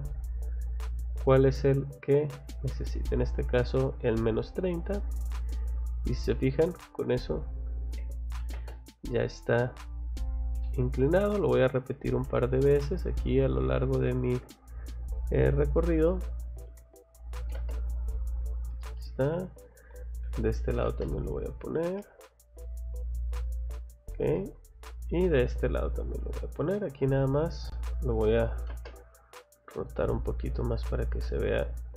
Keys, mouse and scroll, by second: 1.6 click, 2.3 Escape, 2.7 middle click, 4.5 scroll down 2, 5.1 click, 5.7 scroll up 2, 8.0 c, 8.4 o, 8.5 space, 9.5 click, 9.8 scroll down 1, 10.6 middle click, 11.9 click, 12.3 middle click, 13.7 click, 15.1 scroll down 1, 15.9-16.3 scroll up 1, 16.3 click, 17.4 m, 17.5 space, 17.7 middle click, 18.4 click, 18.8 click, 19.1 Escape, 19.3 click, 20.2 c, 20.7 o, 21.0 click, 21.3 scroll down 1, 22.0 middle click, 23.4 click, 23.7 scroll down 1, 24.3 middle click, 25.2 scroll up 1, 26.5 click, 26.7 Escape, 26.9 click, 27.1 click, 28.1 r, 28.5 o, 28.7 space, 29.2 click.